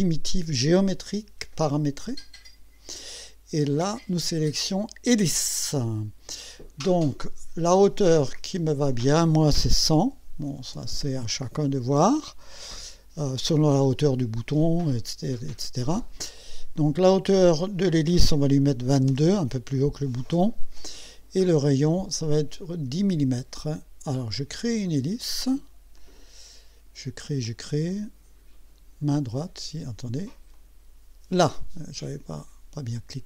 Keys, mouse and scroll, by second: 2.2 click, 3.8 click, 5.4 click, 8.4 click, 10.0 KP_1, 10.5 KP_0, 16.4-17.8 drag, 18.7 KP_2, 21.9 click, 22.7 KP_0, 24.4 click, 26.0 click, 27.5-29.3 drag, 30.5 click, 32.4 right click.